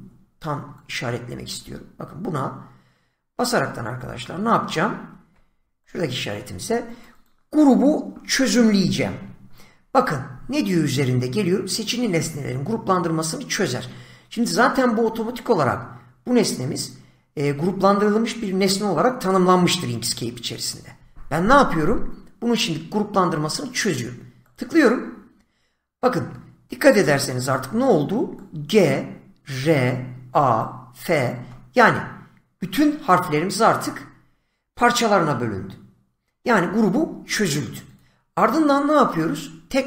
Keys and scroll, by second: 4.2 <, 26.9 <.